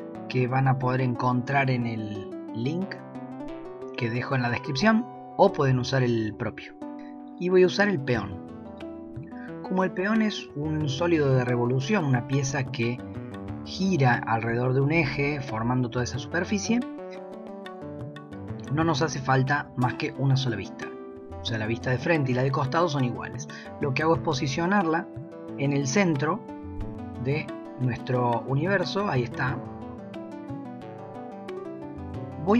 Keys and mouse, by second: 12.4 s, 18.4 g, 24.2-24.6 shift+middle drag, 28.5-31.7 middle drag, 32.3-32.5 shift+middle drag.